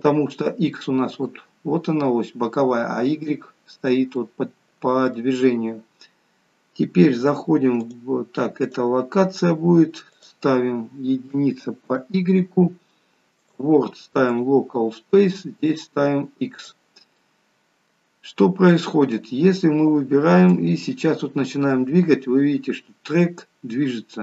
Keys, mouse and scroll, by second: 0.7 middle click, 4.3 middle click, 6.4-7.3 scroll down 2, 8.0 click, 8.8 click, 9.4-10.2 scroll down 1, 10.2 click, 13.4 click, 15.7 click, 17.3 middle click, 20.7 click.